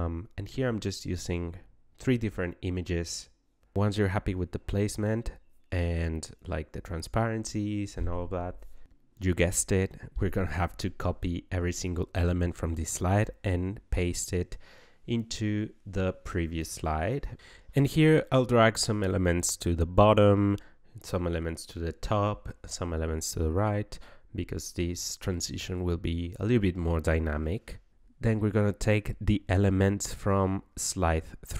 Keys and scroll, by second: 5.4 KP_6, 5.5 KP_0, 5.7 Return, 13.3 ctrl+c, 14.9 ctrl+v, 30.6 ctrl+c.